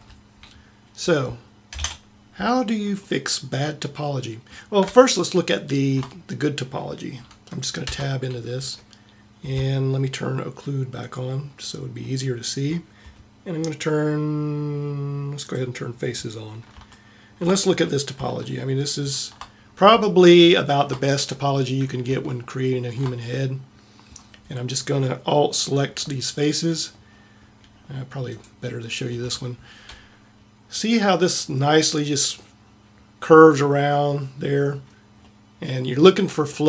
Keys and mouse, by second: 0.0 Escape, 1.8 ctrl+Up, 8.0 Tab, 28.3 middle click.